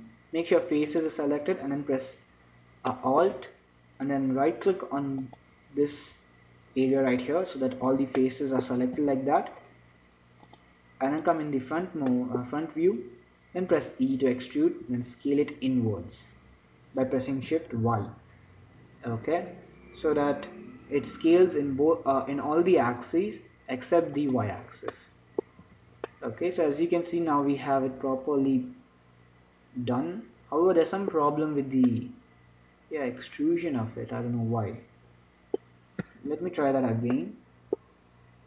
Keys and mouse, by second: 1.1-3.0 drag, 3.3-5.5 middle drag, 5.5-8.1 right drag, 8.1 z, 8.5 click, 9.3 z, 11.6 click, 14.1 e, 15.2 s, 25.2-26.4 middle drag, 25.9 z, 26.4 click, 27.4-28.9 middle drag, 31.9-34.1 middle drag, 36.0 middle click, 36.7 ctrl+z, 37.5 click.